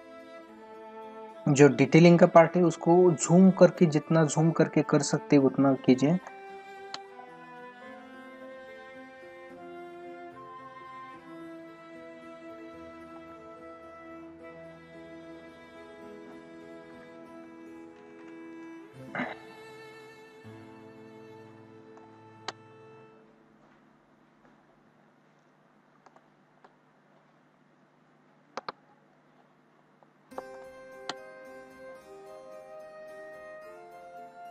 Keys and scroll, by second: 2.5 ctrl+=, 6.3 space, 22.0 space, 26.1 space, 28.6 ctrl+alt+z, 30.5 space, 33.0 ctrl+=.